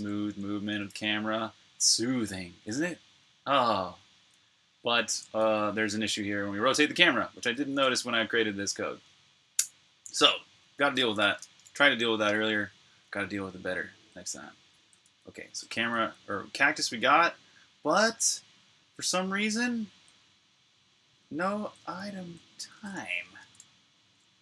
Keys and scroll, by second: 0.0-1.1 typing, 2.7-5.4 typing, 9.5-15.9 typing, 17.0-17.7 typing, 18.9-22.1 typing, 23.0 super+q.